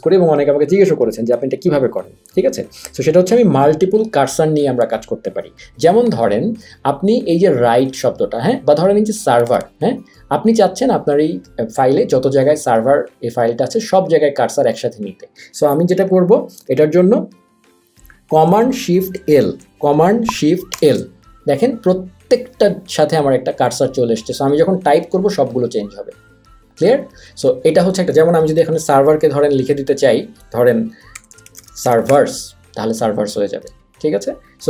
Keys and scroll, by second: 20.8 shift+super+l, 31.0-32.6 typing.